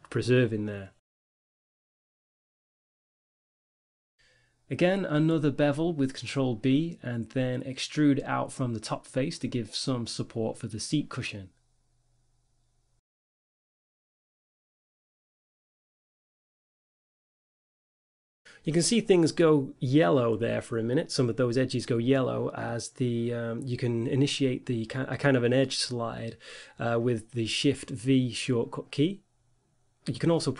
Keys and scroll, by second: 0.4 Tab, 2.2 Tab, 2.6 ctrl+r, 4.1 ctrl+b, 5.9 5, 7.4-9.3 typing, 10.4-12.9 typing, 14.4 g, 15.6 ctrl+r, 18.7 shift+v, 21.9 ctrl+r, 24.3 ctrl+r, 25.8 ctrl+r, 26.5 a, 28.9 Tab.